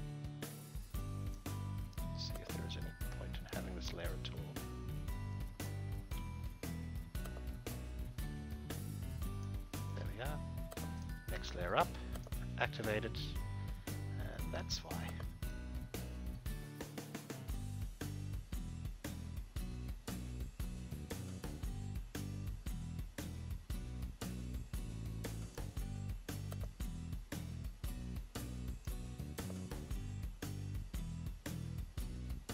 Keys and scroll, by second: 6.2 ctrl+z.